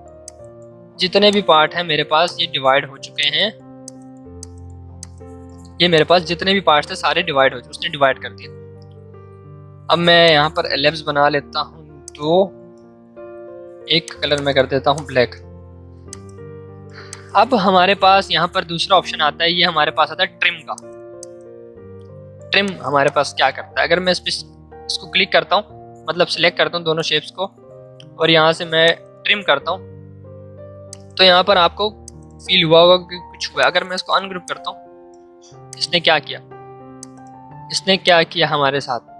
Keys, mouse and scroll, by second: 9.4 l, 10.2 shift+click, 10.8-11.8 typing, 12.0 alt+click, 12.2 alt+Caps_Lock, 14.0-19.9 drag, 20.6-22.6 drag, 28.8 click, 32.4 right click, 33.5 click, 37.6 ctrl+z, 38.0 ctrl+click.